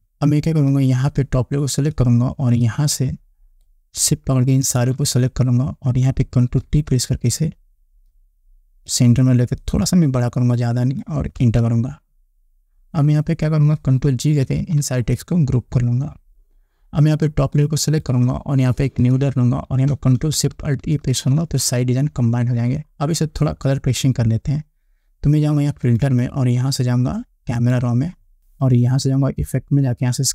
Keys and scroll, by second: 7.1 ctrl+t, 11.8 Return, 14.9 ctrl+g, 21.6 ctrl+alt+shift+e.